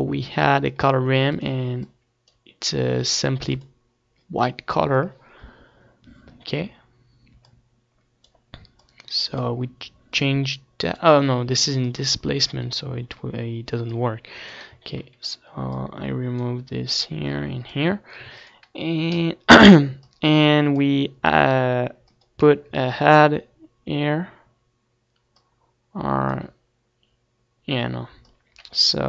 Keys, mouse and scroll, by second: 2.0-3.6 drag, 3.6 ctrl+s, 7.9-13.9 drag, 14.4-18.8 drag, 18.5 ctrl+s, 20.3-21.9 drag, 22.3-24.9 drag, 22.7 shift+d, 25.6-27.4 drag, 28.4-29.0 drag.